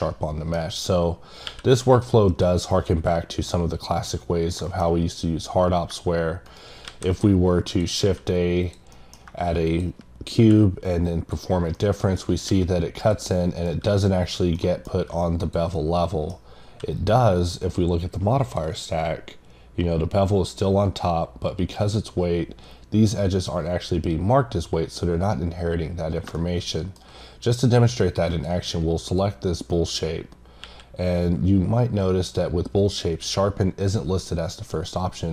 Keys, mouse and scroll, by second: 0.6 scroll down 1, 1.9 click, 2.7 click, 4.3 scroll down 2, 4.6 middle click, 5.5-5.9 scroll up 1, 6.5 right click, 7.7 click, 8.6 click, 8.9 middle click, 9.6 click, 11.0 click, 11.7 middle click, 12.2 scroll up 1, 13.0 click, 13.3 middle click, 14.2 click, 14.6 middle click, 15.4 click, 15.7 middle click, 17.0 click, 17.4 click, 18.4 click, 26.5 middle click, 28.3 click, 29.0 click, 29.7 click.